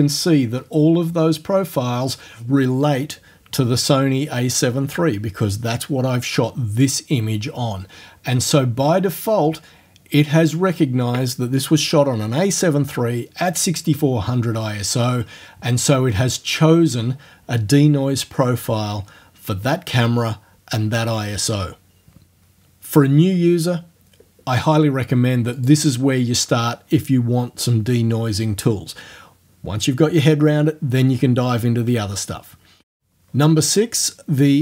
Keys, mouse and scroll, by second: 25.6 click.